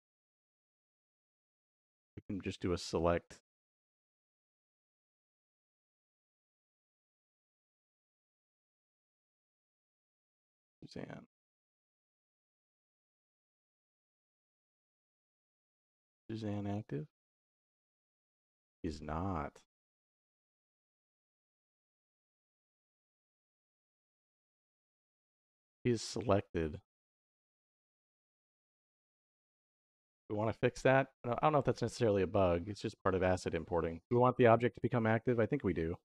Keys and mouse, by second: 2.1 middle click, 3.1 middle click, 3.9 middle click, 4.8 middle click, 6.6 shift+y, 9.1 y, 11.0 middle click, 11.7 middle click, 15.1-16.4 drag, 28.5 middle click, 29.4 middle click.